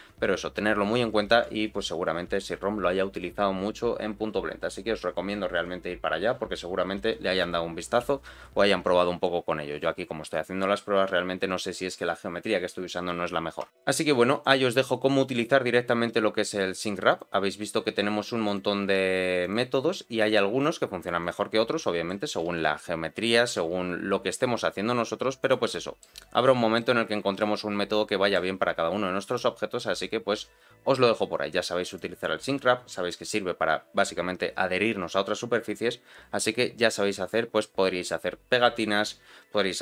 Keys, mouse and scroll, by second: 3.9-5.2 scroll down 2, 5.2-6.6 scroll down 1, 13.6 Tab, 13.7 click, 15.6-17.1 drag, 18.4-19.5 drag, 20.6 click, 21.8 middle click, 22.4 g, 25.7 middle click, 26.4 middle click, 26.9-27.4 scroll up 1, 27.4-28.4 middle drag, 29.3 click, 31.9 click.